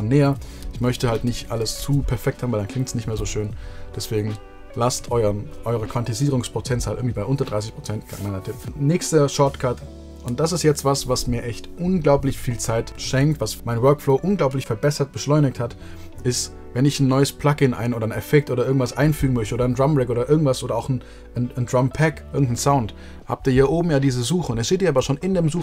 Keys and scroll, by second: 0.5 super+z, 0.8 super+z, 1.0 super+z, 1.3 super+z, 1.5 super+z.